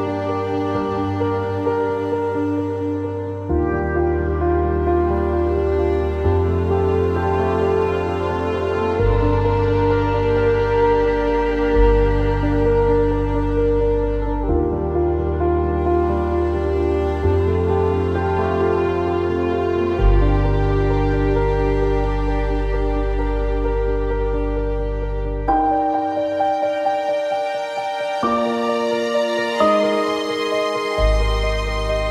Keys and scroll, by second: 14.7 q.